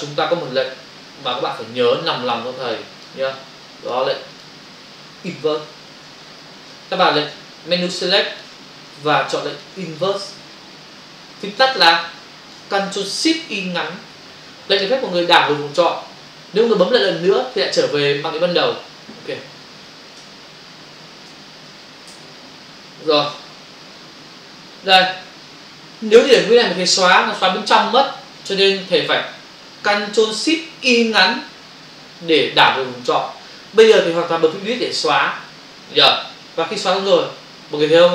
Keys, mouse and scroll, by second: 1.3 click, 2.1 click, 2.7 click, 3.4 click, 4.3 click, 5.7 b, 6.3 ctrl+click, 7.9 click, 8.7 space, 10.4 click, 11.9 ctrl+space, 12.0 ctrl+click, 12.1 ctrl+space, 12.7 space, 22.1 n, 27.4 Delete, 35.0 Delete.